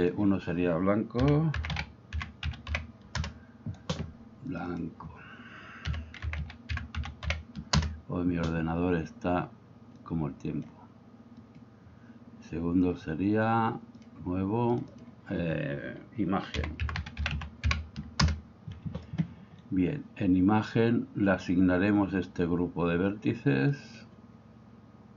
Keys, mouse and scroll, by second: 0.1-3.8 drag, 4.5 click, 4.7 click, 10.1 click, 11.4 click, 14.0 click, 14.8 click, 15.0 click, 23.7 click.